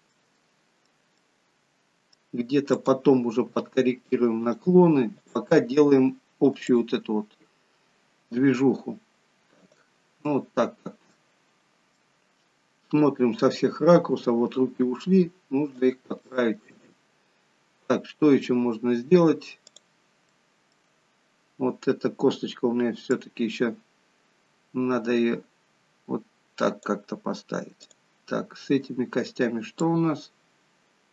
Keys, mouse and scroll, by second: 0.1 middle click, 1.1 middle click, 2.7 click, 3.5 g, 5.1 click, 6.6 shift+click, 8.4 g, 10.3 middle click, 11.6 middle click, 13.2-13.6 scroll up 2, 14.2 g, 16.2 middle click, 19.7 click, 20.3 middle click, 22.0-22.7 scroll down 3, 22.7-23.2 scroll down 3, 23.2 click, 27.8 click, 29.8 click.